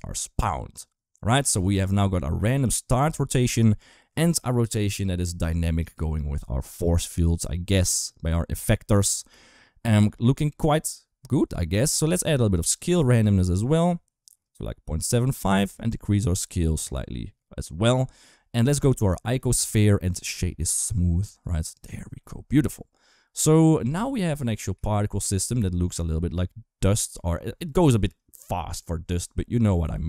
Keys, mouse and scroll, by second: 1.3 space, 1.9 space, 12.3-14.8 drag, 15.5-17.7 shift+drag, 18.2-18.5 shift+middle drag, 18.8 shift+middle drag, 19.7 click, 20.0-20.7 right drag, 21.8 shift+middle click, 22.1 shift+middle click, 23.3 shift+middle drag, 23.6 space, 24.1 space, 24.6 shift+middle drag, 25.3 shift+middle drag, 25.6 space.